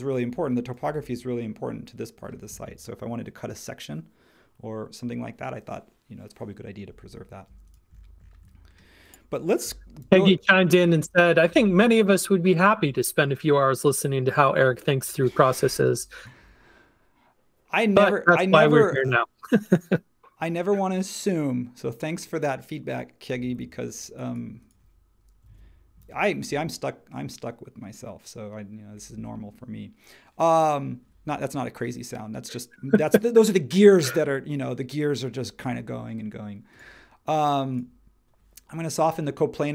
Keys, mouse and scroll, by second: 7.5-10.0 drag, 10.0 shift+s, 15.6 h, 16.4 space, 25.5 super+a.